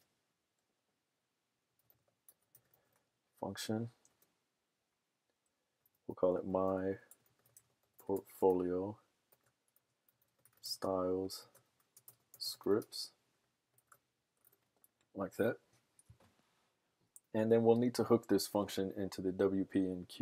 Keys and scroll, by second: 0.0-4.0 typing, 5.8-14.6 typing, 16.3 typing.